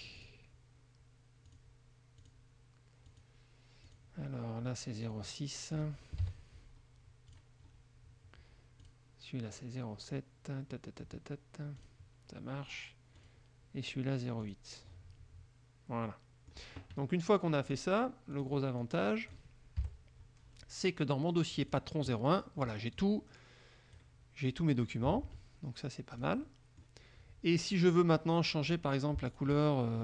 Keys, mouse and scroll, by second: 0.3 click, 1.6 click, 2.4 click, 3.2 click, 4.0 click, 5.2 click, 6.4 KP_6, 7.4 click, 9.0 click, 12.0 click, 13.4 click, 14.6 click, 16.2 middle click, 17.8 click, 18.5 click, 19.0 click, 20.0 Delete, 21.7 click, 23.1-24.3 drag, 24.3-25.2 scroll up 1, 25.2-26.3 alt+scroll up 1, 25.5 alt+Tab, 26.3 click, 28.1 click, 28.8 click, 29.4 shift+click.